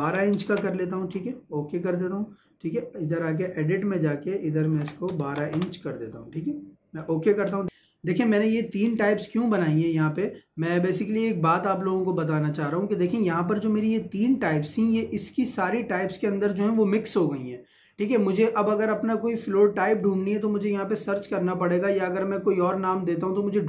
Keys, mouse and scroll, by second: 1.9 click, 5.6 Return, 7.0 click, 9.4 click.